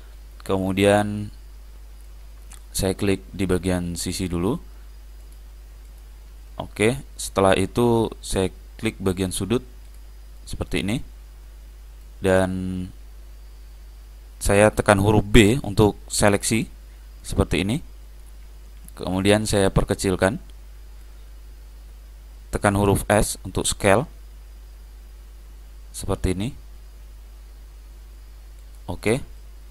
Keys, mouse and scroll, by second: 0.8-2.8 middle drag, 4.1-7.6 drag, 6.6-9.2 middle drag, 9.2 click, 10.8-15.3 middle drag, 12.6-13.4 scroll down 1, 13.4-14.1 scroll up 1, 15.8 b, 19.0-20.9 middle drag, 23.2 s, 29.5-29.7 middle drag.